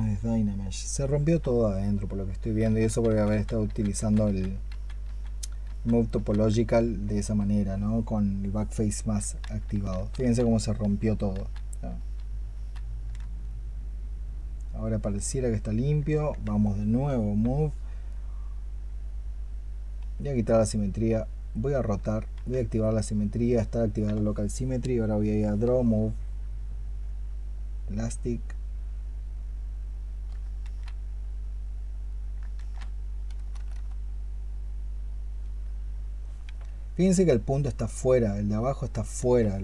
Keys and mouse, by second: 2.2 ctrl+z, 2.5 ctrl+z, 3.0 ctrl+z, 3.2 ctrl+z, 3.8 ctrl+z, 4.1 ctrl+z, 4.9 ctrl+z, 5.5 ctrl+z, 6.0 ctrl+z, 9.8 ctrl+z, 10.0 ctrl+z, 10.7 ctrl+z, 11.2 ctrl+z, 12.4 ctrl+z, 19.8 x, 22.2 x, 30.5 ctrl+z, 32.4 ctrl+z, 33.2 i, 33.4 i, 39.0 ctrl+z.